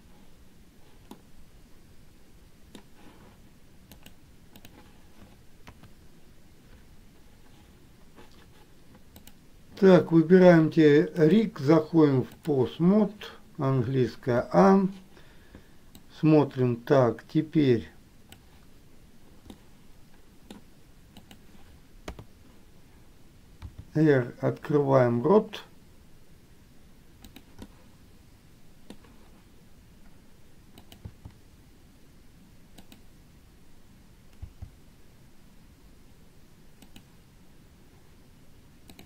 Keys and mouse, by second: 1.3-3.1 middle drag, 4.2 click, 9.6 click, 11.5-12.8 drag, 16.3-18.7 drag, 19.9 middle click, 27.8-29.2 middle drag, 31.1 click, 31.3 r.